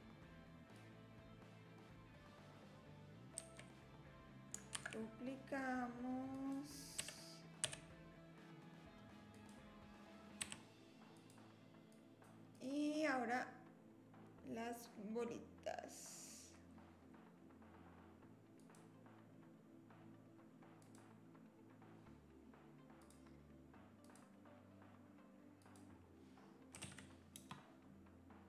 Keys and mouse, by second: 0.7-3.2 drag, 4.8 shift+d, 7.0 r, 10.4 r, 11.9 click, 12.5 click, 18.7-21.1 drag, 23.0 click, 24.0 click, 25.6-28.2 drag.